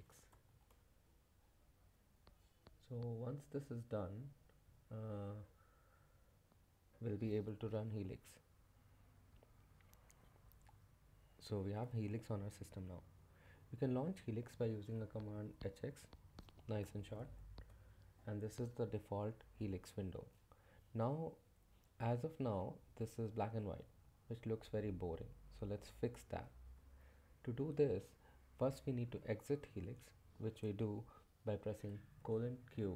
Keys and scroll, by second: 0.0-1.0 typing, 16.6-17.5 typing, 17.7 Return, 32.0-32.9 typing.